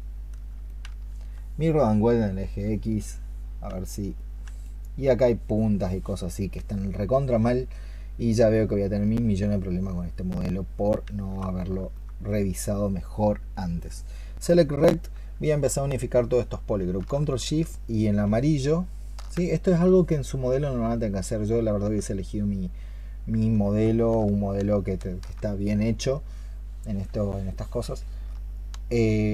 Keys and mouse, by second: 3.7 shift+click, 4.3 shift+click, 11.8 alt+click, 17.9 ctrl+shift+click.